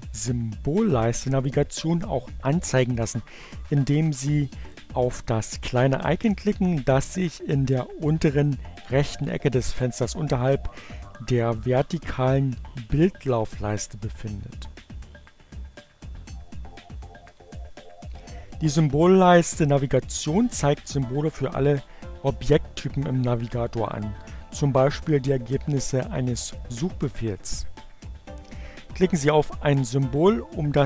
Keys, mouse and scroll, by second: 17.0 click.